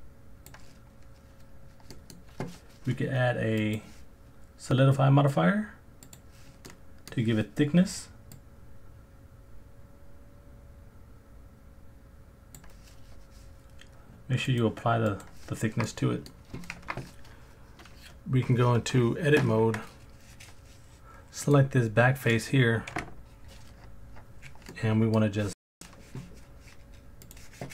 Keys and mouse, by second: 1.9 middle click, 3.7-6.2 drag, 6.7-7.1 middle drag, 8.4-12.6 drag, 14.6-15.2 drag, 15.9-16.3 middle drag, 19.6 Tab, 21.5 click, 22.9 KP_Decimal, 24.7 middle click, 27.2 click.